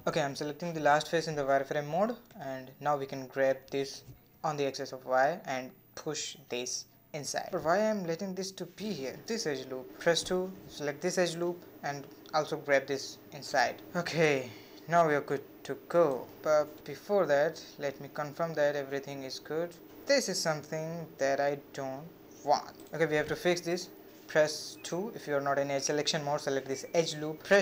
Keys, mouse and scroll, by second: 0.2 3, 1.0 click, 1.8 z, 4.6 g, 8.5 2, 8.8 alt+click, 10.3 g, 14.4 scroll down 1, 14.5 middle click, 15.4-15.7 scroll down 3, 15.7-17.5 middle drag, 17.5 scroll down 1, 17.8-19.1 middle drag, 19.1 scroll down 1, 19.3-19.9 scroll up 4, 19.9 shift+middle click, 20.6 scroll down 1, 20.8-22.9 middle drag, 22.9-23.4 scroll up 1, 23.4-25.7 shift+middle drag, 25.7 alt+click, 26.6-27.6 middle drag.